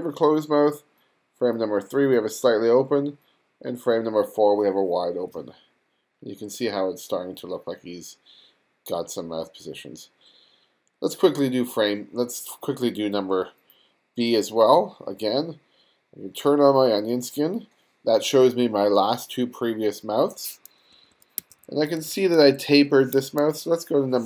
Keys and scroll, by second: 21.0 w, 21.4 2, 23.2 1.